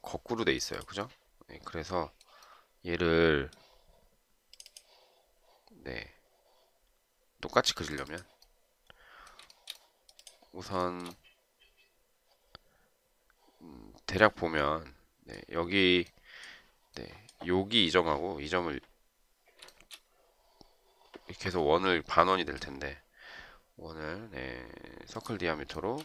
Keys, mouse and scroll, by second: 9.9 shift+right click, 20.0 shift+right click.